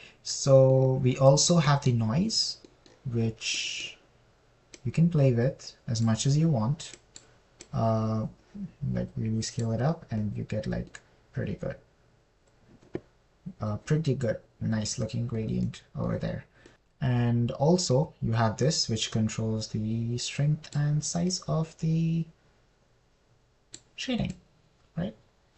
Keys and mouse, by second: 6.2-7.4 middle drag, 8.4 middle click, 9.0-11.0 middle drag, 9.4 click, 17.1 middle click, 19.3-22.2 middle drag, 20.9 click, 22.0 click, 22.7-25.2 middle drag.